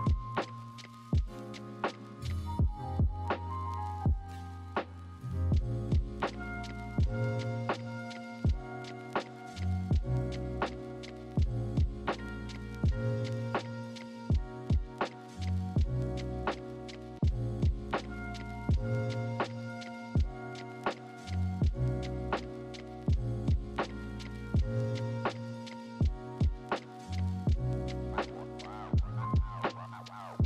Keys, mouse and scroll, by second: 1.8 ctrl+z, 9.9 ctrl+z, 15.9 ctrl+=, 20.2 ctrl+z, 21.9 ctrl+shift+n, 22.4 ctrl+-.